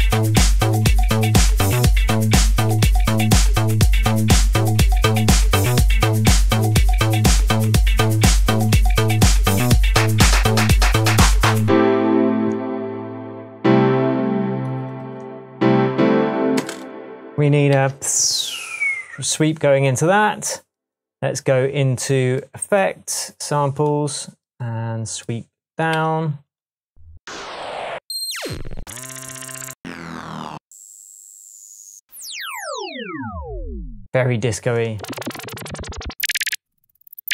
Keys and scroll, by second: 0.3 d, 0.9 d, 1.5 d, 2.6 d, 2.7 shift+super+Tab, 3.4 shift+Tab, 16.5 space, 17.5 super+space, 17.7 super+t, 25.9 Right, 27.9 Down, 36.5 Down, 37.1 Up.